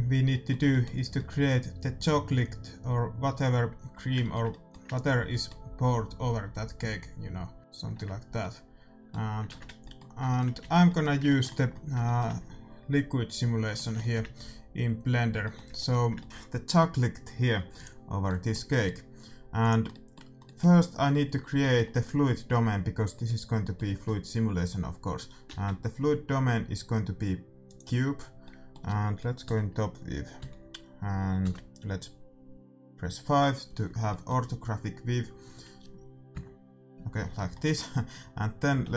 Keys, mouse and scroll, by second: 0.2-7.5 middle drag, 7.6 d, 8.3-10.2 middle drag, 9.4 ctrl+z, 10.5 shift+c, 18.1-23.4 middle drag, 19.6-21.4 drag, 23.6-25.2 middle drag, 25.4 shift+a, 28.2 scroll up 1, 28.4-30.2 middle drag, 34.0 middle click, 38.7 g.